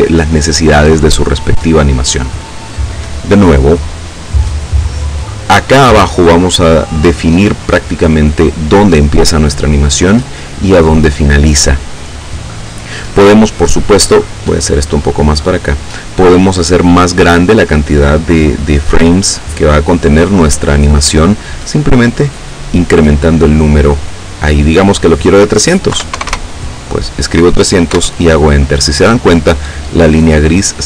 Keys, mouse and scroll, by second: 14.1-15.8 middle drag, 22.0 click, 24.5 KP_3, 26.0 KP_0, 27.9 KP_Enter.